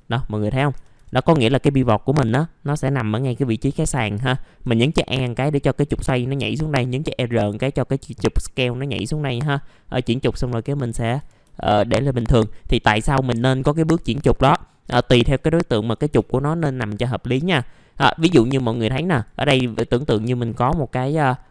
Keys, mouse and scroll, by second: 0.2 alt+middle click, 1.9-4.0 scroll up 1, 4.0 scroll down 1, 4.3 alt+middle click, 10.6 click, 11.1 middle click, 11.3 scroll down 1, 11.7 middle click, 12.8 ctrl+right click, 13.7 click, 14.3 ctrl+click, 15.5 right click, 16.1 click, 16.6 alt+middle click, 18.7 click, 19.8 middle click, 20.1 alt+middle click, 21.1 alt+middle click.